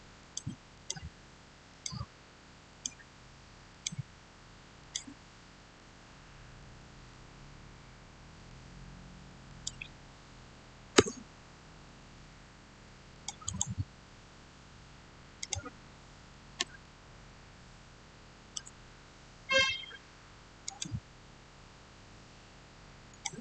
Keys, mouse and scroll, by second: 7.0 shift+middle click, 7.7-8.4 shift+scroll down 1, 9.3 click, 10.8 Return, 13.0 click, 13.3 right click, 15.3 click, 16.7-20.5 shift+middle drag, 20.5 click, 23.0 click.